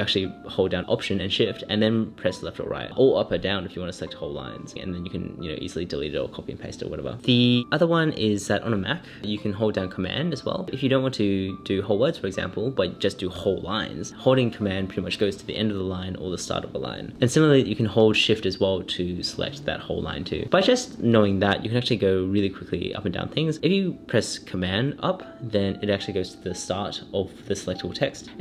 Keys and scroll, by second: 0.6 alt+shift+Left, 2.4 alt+shift+Right, 3.7 alt+shift+Down, 4.4 alt+shift+Up, 16.3 super+Right, 16.4 super+Left, 16.7 super+Right, 17.1 super+Left, 17.5 super+Up, 17.6 super+Right, 18.0 super+Left, 18.3 super+Right, 18.4 super+Left, 18.9 super+Up, 19.2 shift+super+Right, 20.4 shift+super+Left, 21.3 shift+super+Down, 21.8 shift+super+Right, 22.8 shift+super+Down, 23.3 shift+super+Right, 24.1 shift+Down, 25.4 super+Down, 25.8 super+Up, 27.0 super+Down, 28.2 super+Up.